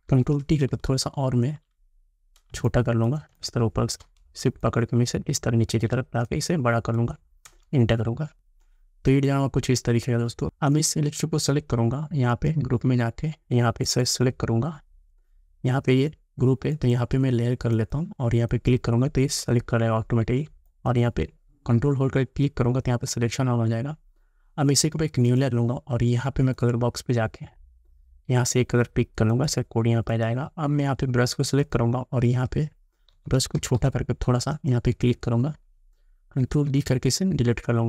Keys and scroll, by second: 7.5 Return, 10.4 Return, 33.2 [, 36.6 ctrl+d.